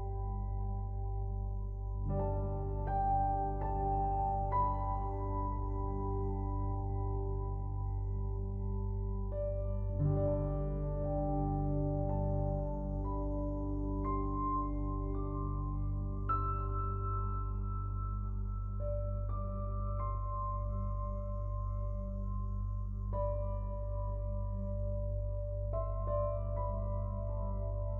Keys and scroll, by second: 11.2 ctrl+t, 25.6 ctrl+l.